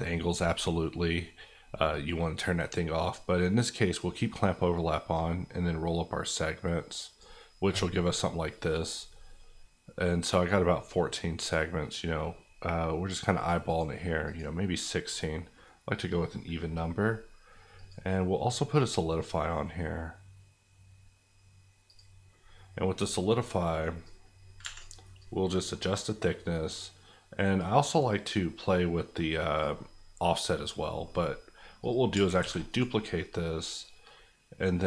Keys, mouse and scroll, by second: 8.0 middle click, 11.4 click, 15.1 middle click, 17.7 click, 24.6 Escape, 25.2 click, 31.0 middle click, 31.8 click, 32.4 shift+d, 32.7 right click, 33.8 click.